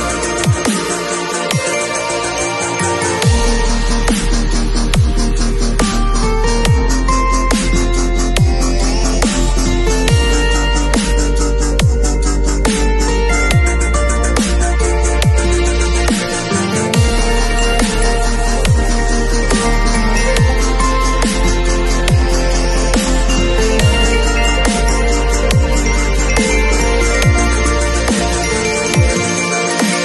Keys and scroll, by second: 14.2 shift+super+a.